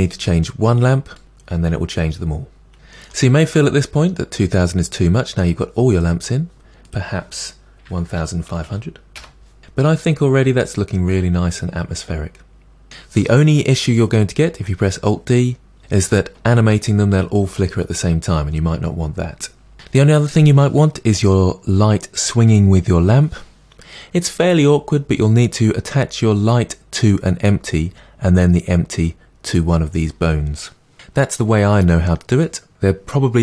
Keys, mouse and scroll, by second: 0.3-1.2 scroll down 1, 1.2-2.6 drag, 2.7-9.2 middle drag, 9.2 0, 9.6-11.9 middle drag, 19.7 click.